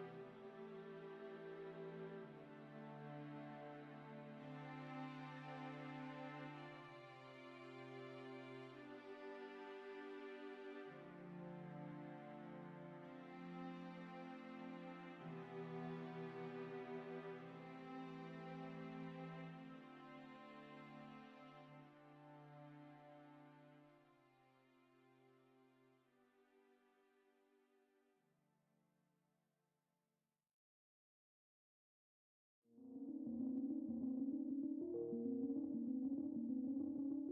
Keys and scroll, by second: 7.9-8.6 typing, 10.1 alt+Tab, 13.8 alt+Tab, 14.0 alt+Tab, 17.5 alt+Tab.